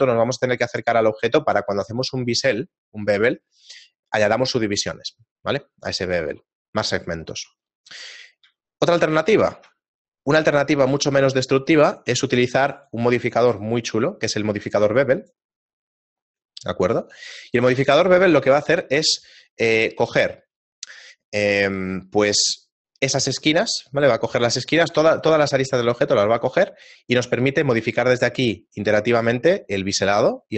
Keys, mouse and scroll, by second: 6.8-7.5 scroll down 6, 8.1 right click, 8.1-8.5 scroll down 2, 8.5 x, 9.5 shift+a, 11.5 shift+middle click, 13.4 click, 17.5 shift+middle click, 17.9 middle click, 18.5 shift+middle click, 26.4 click.